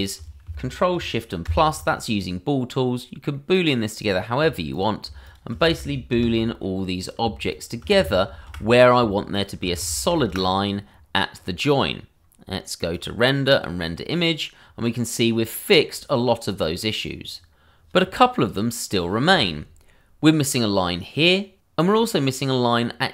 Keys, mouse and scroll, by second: 1.4 ctrl+shift+KP_Add, 3.3 middle click, 4.1 click, 5.2 shift+click, 5.3 click, 6.1 ctrl+shift+KP_Add, 7.0 click, 7.5 shift+click, 8.2 ctrl+shift+KP_Add, 9.3 shift+click, 9.4 click, 10.1 ctrl+shift+KP_Add, 10.9-11.4 scroll down 1, 12.9 click.